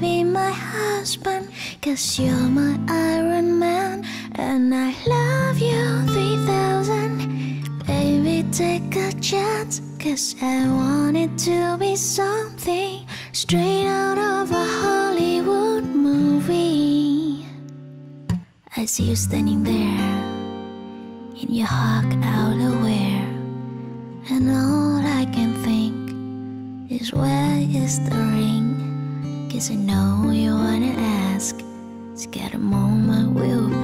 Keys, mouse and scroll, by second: 8.2-9.2 typing, 9.4 Return.